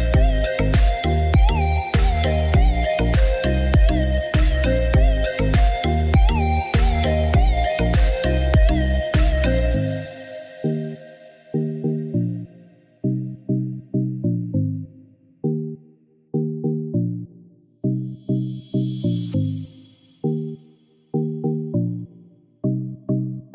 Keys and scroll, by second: 21.9 Escape.